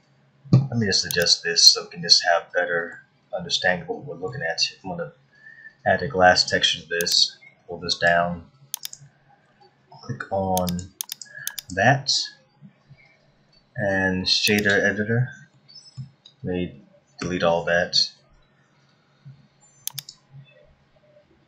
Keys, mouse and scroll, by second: 1.2 click, 2.1 middle click, 4.0 middle click, 7.1 click, 8.8 click, 10.9 click, 11.5 click, 15.5 middle click, 20.9-21.2 scroll down 1.